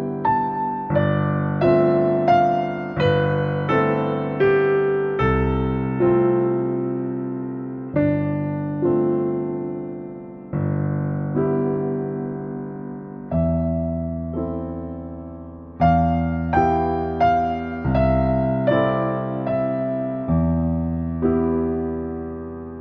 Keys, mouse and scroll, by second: 2.8 click, 3.8-6.1 drag, 7.5 click, 7.7 middle click, 8.2 click, 8.4 shift+middle click, 9.0 click, 9.1 scroll down 1, 10.8 shift+middle click, 11.3 scroll up 1, 11.6 scroll down 1, 11.8-15.0 middle drag, 15.2 click, 16.0 click, 17.9 click, 19.2 click, 19.7 click, 21.0 click, 22.4-22.8 scroll up 5.